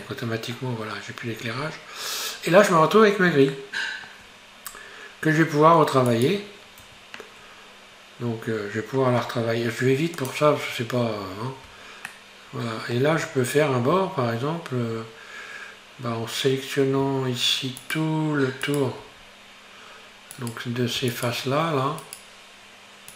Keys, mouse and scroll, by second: 0.1-1.6 middle drag, 1.6-1.9 scroll up 2, 2.6 scroll up 2, 3.6-4.8 shift+middle drag, 4.8 scroll up 2, 6.2 right click, 6.9 Tab, 7.6 scroll up 1, 9.3 scroll down 6, 10.3 click, 12.2-15.2 shift+middle drag, 17.9 alt+right click, 18.7 alt+right click, 19.2-19.6 scroll up 3, 20.4 right click, 21.1 shift+right click, 22.0-23.1 shift+right drag.